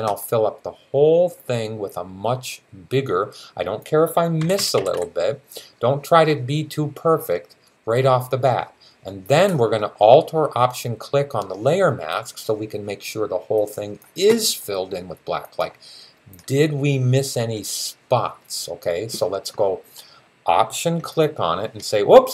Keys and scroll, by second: 4.2 ], 4.4 ], 4.6 ], 4.8 ], 6.9 typing.